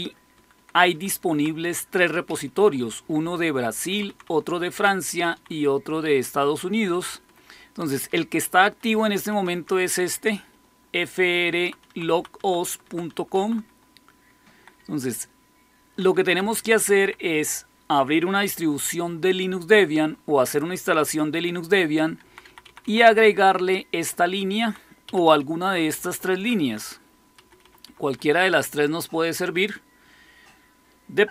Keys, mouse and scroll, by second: 0.2 Down, 0.4 Down, 0.6 Down, 0.8 Down, 1.0 Down, 2.2 Up, 2.4 Up, 2.5 Up, 2.7 Up, 2.9 Up, 3.8 Down, 4.0 Down, 4.2 Down, 5.0 Down, 5.2 Down, 7.0 Up, 7.2 Up, 7.4 Up, 7.9 Down, 8.7 Up, 9.0 Up, 9.2 Down, 9.5-12.0 Down, 10.4-11.6 Right, 12.0 Right, 12.0 typing, 12.3 Right, 12.5 Right, 12.7 Right, 13.0 Right, 14.5 Left, 14.7 Left, 14.9 Left, 15.4-15.8 Left, 16.1 Left, 16.3 Left, 16.5 Left, 16.7 Left, 16.9 Left, 22.1 Left, 22.4 Left, 22.6 Left, 22.7 Left, 23.1 Right, 23.6-24.6 Right, 25.0 Up, 25.2 Up, 25.8 Down, 26.0 Down, 26.2 Down, 26.5 Down, 27.3 Up, 27.5 Up, 27.8 Up, 28.0 Up.